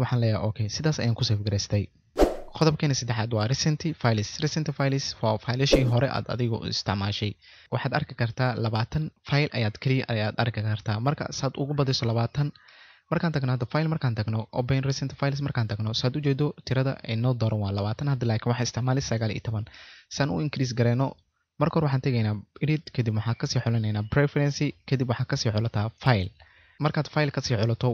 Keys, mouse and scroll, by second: 26.4 click, 26.4 typing.